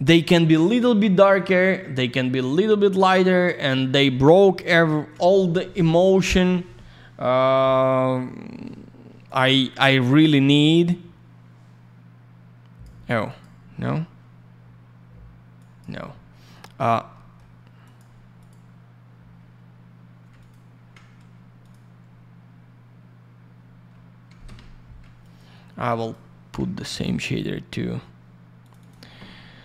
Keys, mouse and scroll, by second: 0.0 click, 4.5 click, 4.6 click, 9.2 click, 9.4 click, 10.8 click, 13.2 click, 13.4 click, 15.5 click, 16.0 middle click, 17.1 middle click, 17.8 click, 17.9 click, 18.3 click, 18.4 click, 20.3 ctrl+click, 21.6 click, 24.4 Escape, 25.2 ctrl+click, 25.9 ctrl+click, 27.0 click, 28.6 click, 28.8 click.